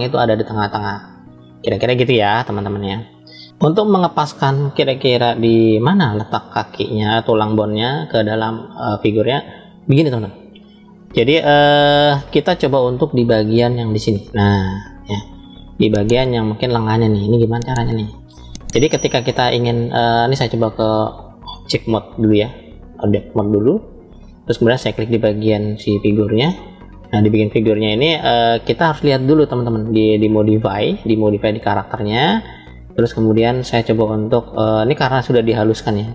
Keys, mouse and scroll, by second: 6.9-9.1 middle drag, 9.9 scroll up 1, 10.8 shift+middle click, 12.1-13.0 scroll up 2, 13.6-15.2 middle drag, 13.6 scroll up 1, 17.5-18.5 middle drag, 20.6-22.3 drag, 23.5 scroll down 2, 25.2 click, 25.2 scroll down 1, 30.1 click.